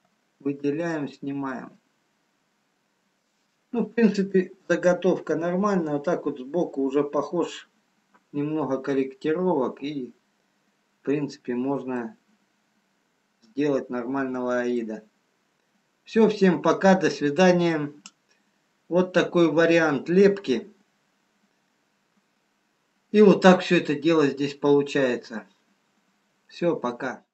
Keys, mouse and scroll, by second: 0.9 middle click, 2.0 middle click, 3.4-3.9 scroll up 2, 3.9 scroll down 1, 4.3 middle click, 6.2-6.7 scroll down 1, 9.2 middle click, 14.6-15.1 scroll down 1, 15.1 middle click.